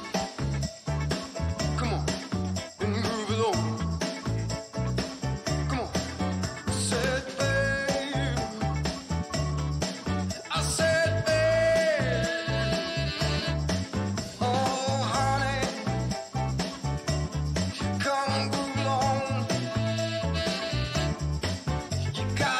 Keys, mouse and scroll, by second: 0.0 click, 3.2 click, 5.2 click, 6.1-8.6 drag, 9.6 click, 10.1 click, 10.7 click, 13.4-14.3 scroll down 2, 14.6 click, 16.8-17.4 scroll down 2, 18.5 click, 21.9 ctrl+click.